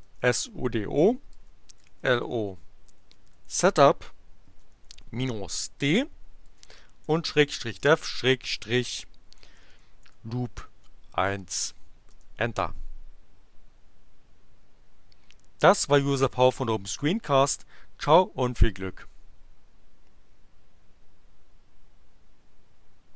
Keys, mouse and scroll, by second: 0.0-5.3 typing, 6.4-10.9 typing, 12.1 Return.